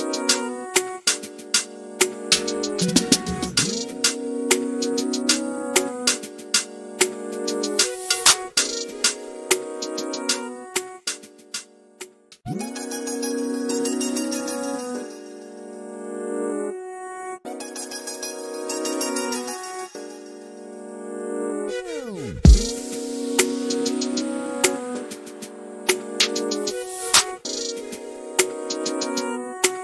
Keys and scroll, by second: 17.8 ctrl+shift+a.